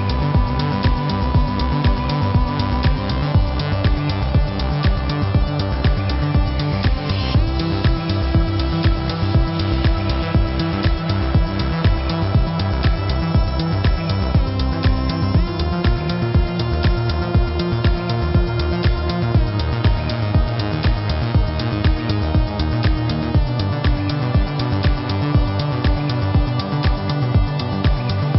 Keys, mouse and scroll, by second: 3.2 z, 3.4 click, 6.3 ctrl+z, 7.3 click, 8.4 click, 13.4 click, 13.8-14.6 typing, 14.6 ctrl+z, 15.1 click, 16.7 v, 16.8 click, 17.5 click, 18.2-22.2 typing, 18.2 click, 19.9 click, 20.3 click, 20.8 click, 21.5 click, 22.8 click, 23.3 space, 23.5 click, 23.6 -, 23.9 click, 24.1 space, 24.6 click, 26.9 space, 27.0 click, 27.5 ctrl+=, 28.2 click.